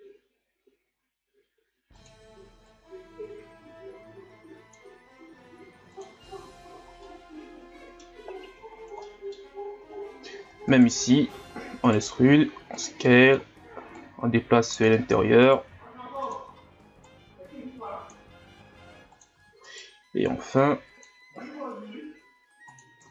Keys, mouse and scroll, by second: 2.7-5.0 drag, 5.0 s, 6.2 scroll down 2, 6.4 Tab, 7.0-8.3 middle drag, 8.3-9.0 scroll up 1, 9.0-9.4 middle drag, 9.4 scroll up 2, 9.8 Tab, 10.7 alt+right click, 11.6 e, 13.1 middle click, 13.9-15.2 drag, 15.2 e, 17.1-18.6 drag, 18.6 s, 20.6 click, 21.3 s, 23.0 Tab.